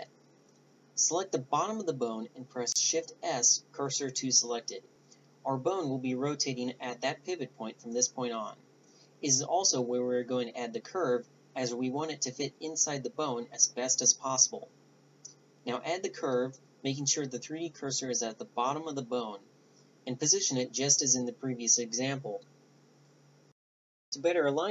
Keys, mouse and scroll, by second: 0.3-3.3 drag, 2.2 shift+s, 4.6-6.5 drag, 6.5 r, 8.2-9.2 drag, 10.6 click, 11.4 Tab, 13.7 KP_7, 14.2 KP_5, 14.8 KP_5, 15.3 middle click, 15.5 Tab, 15.8 click, 16.1 r, 18.4 a, 18.7 a, 19.0-21.6 middle drag, 21.6-23.3 drag.